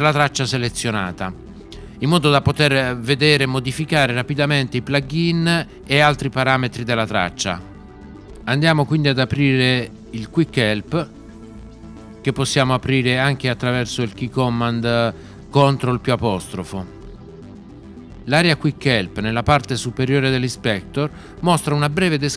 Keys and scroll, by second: 15.7 ctrl+'.